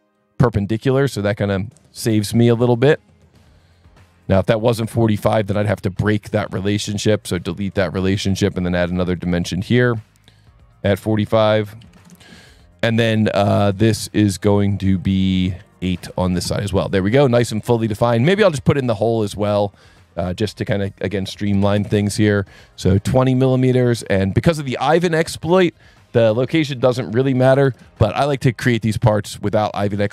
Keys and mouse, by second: 0.5 click, 0.7 s, 1.5 click, 2.4 click, 3.5 click, 4.1 click, 4.9 KP_4, 5.0 KP_5, 5.2 KP_Enter, 6.2 Escape, 6.8 click, 7.0 Delete, 7.6 s, 8.3 click, 9.1 click, 9.8 click, 10.4 click, 11.6 KP_1, 11.8 KP_3, 11.9 KP_5, 12.0 KP_Enter, 13.9 click, 15.0 click, 15.6 click, 16.3 KP_8, 16.4 KP_Enter, 17.2 s, 18.7 click, 19.3 click, 21.5 KP_2, 21.6 KP_0, 21.7 KP_Enter, 22.3 s, 23.2 click, 23.9 click, 25.3 click, 26.9 click, 27.6 KP_2, 27.8 KP_Enter, 27.8 KP_0, 29.2 click.